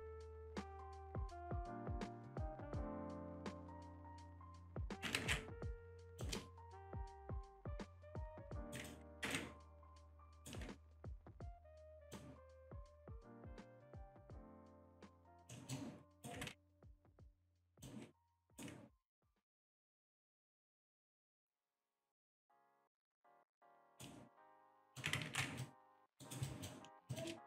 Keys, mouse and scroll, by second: 0.1 click, 2.6 click, 4.4 ctrl+z, 5.2 ctrl+z, 6.1 click, 7.5 shift+click, 8.4 alt+right click, 9.2 ctrl+z, 10.3 alt+right click, 12.0 click, 13.6 click, 15.2 click, 15.5 alt+middle click, 16.1 alt+right click, 17.8 click, 18.3 alt+right click, 23.1 click, 23.6 alt+right click, 24.4 alt+middle click, 24.8 alt+click, 25.3 ctrl+z, 25.6 alt+click, 27.1 alt+shift+click.